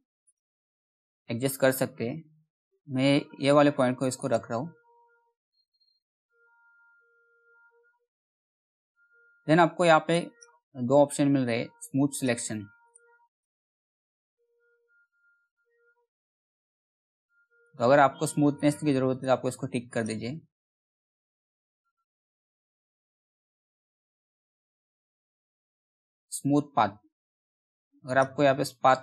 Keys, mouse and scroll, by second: 3.7 click, 4.2 scroll down 1, 4.9 alt+middle click, 5.5 scroll down 1, 6.0 middle click, 6.3-7.4 scroll up 1, 7.4 middle click, 7.7-8.7 scroll up 1, 8.7-9.6 scroll down 1, 9.6 click, 13.5 middle click, 15.2-16.0 scroll up 1, 16.0-17.1 scroll down 1, 17.1 click, 20.9-21.2 scroll down 1, 21.4 alt+middle click, 22.0-22.4 scroll down 1, 22.4-22.9 scroll up 1, 22.9-23.3 scroll down 1, 23.3 middle click, 24.0-25.0 scroll up 1, 25.0 middle click, 25.4 scroll down 1, 25.5-25.8 scroll up 1, 27.6 click.